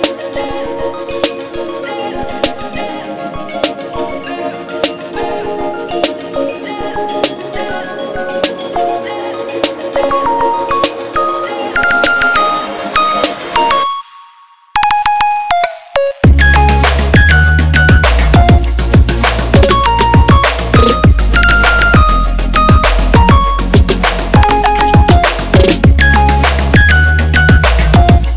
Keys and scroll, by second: 0.9 Down, 1.1 Up.